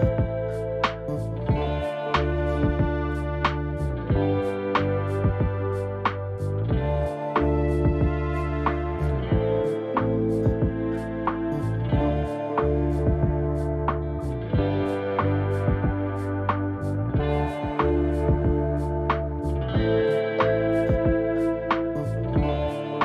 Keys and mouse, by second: 4.0-4.9 middle drag, 7.0 w, 7.4 drag, 8.8 g, 14.1 ctrl+r, 17.7 ctrl+r, 22.9 click.